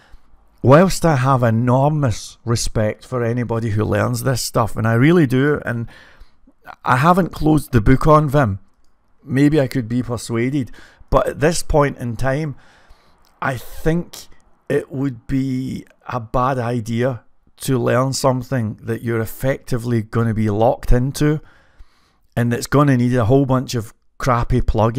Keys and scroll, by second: 6.5 typing, 8.3-12.9 typing.